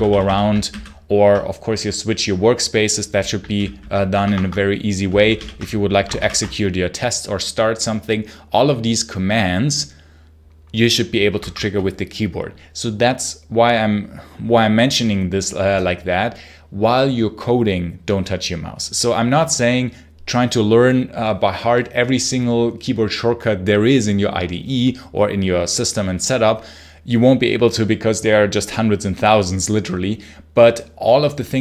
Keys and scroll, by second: 0.5 super+h, 3.4 super+l, 4.0 Escape, 5.0 alt+Right, 6.0 ctrl+shift+F10, 11.2 shift+Escape.